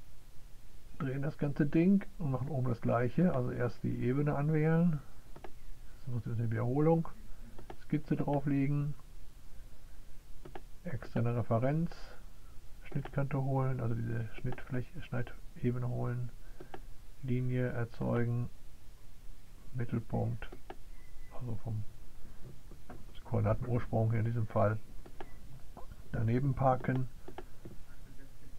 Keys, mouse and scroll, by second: 3.1 click, 7.3 click, 8.9 click, 10.1 click, 15.0 right click, 19.7 click, 26.2 click, 26.7 right click, 28.2 click.